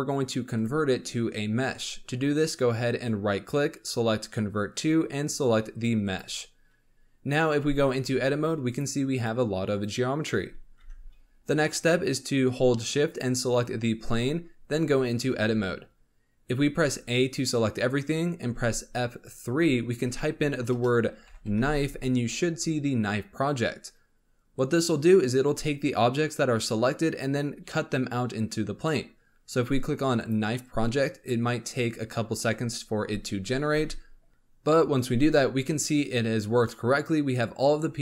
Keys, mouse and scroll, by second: 0.5-3.7 right drag, 7.4 scroll up 4, 7.9 Tab, 8.2 scroll up 4, 8.6 click, 9.1 click, 9.7 click, 10.1-10.5 scroll down 10, 10.7 Tab, 11.0 scroll up 3, 13.0 shift+click, 15.2 Tab, 16.8 a, 19.4 F3.